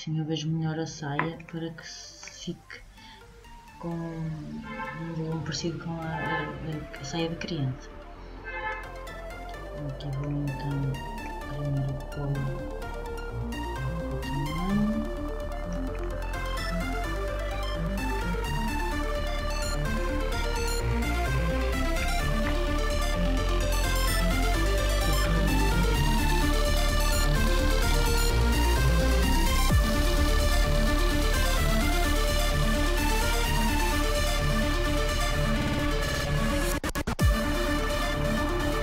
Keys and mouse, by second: 8.2-12.7 middle drag, 15.6-19.6 middle drag, 19.9-26.4 middle drag, 34.7-36.1 middle drag, 36.1-38.8 drag.